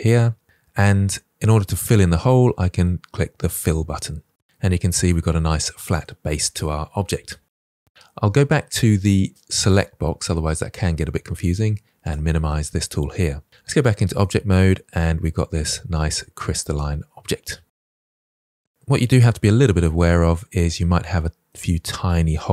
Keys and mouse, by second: 1.0 middle click, 3.8 click, 4.8-7.7 middle drag, 9.7-10.7 drag, 13.5 Tab, 14.1-17.8 middle drag, 18.0-18.4 shift+middle drag, 18.5 middle click, 18.9-19.4 middle drag, 20.9-21.6 middle drag, 22.2-22.5 middle drag.